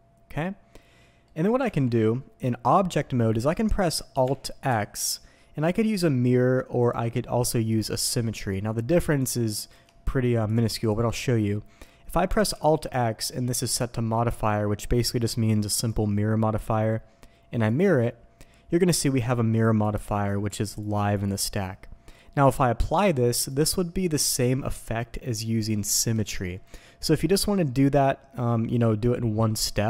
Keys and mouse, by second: 1.6 Tab, 4.6 alt+x, 6.8-29.8 drag.